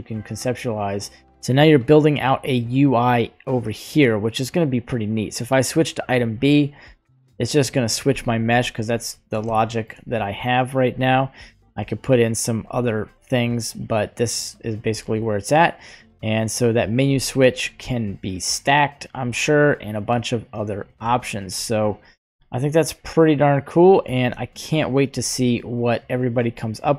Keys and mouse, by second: 0.6-5.4 drag, 7.0 click, 8.6-9.3 shift+middle drag, 9.4-9.8 shift+middle drag, 11.7 click, 12.5 n, 13.4 click, 15.0 click, 16.0-19.2 drag, 19.8 click, 21.3 shift+right click, 22.1 g, 24.2 shift+right click, 26.8 click.